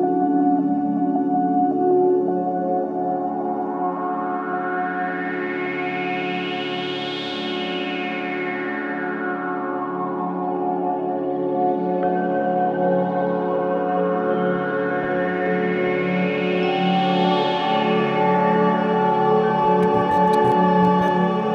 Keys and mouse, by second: 0.2 click, 1.2-4.3 drag, 1.2 typing, 4.7 ctrl+alt+click, 5.6 click, 7.2-8.0 typing, 7.5-8.2 drag, 9.0-10.5 drag, 10.2-11.7 typing, 13.3-14.0 typing, 13.5-17.1 drag, 15.8-18.0 typing, 19.0-21.5 drag.